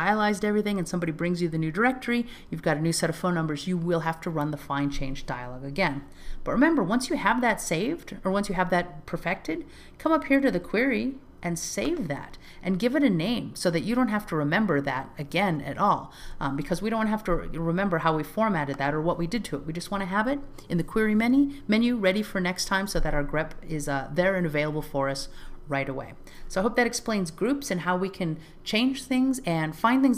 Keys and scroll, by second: 12.1 alt+z, 17.8 alt+z.